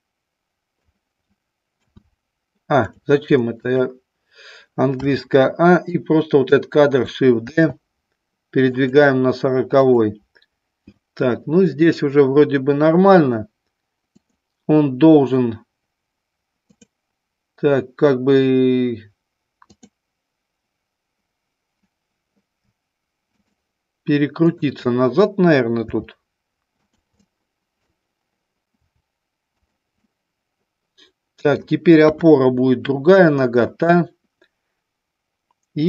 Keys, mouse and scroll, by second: 1.7 a, 3.5 click, 4.8 a, 5.8 click, 7.4 shift+d, 8.7 click, 9.8 click, 16.6 click, 19.6 click, 24.5 shift+click, 25.9 r, 26.9 click, 27.1 middle click, 28.9 r, 29.5 click, 30.0-31.5 middle drag, 31.9 KP_1.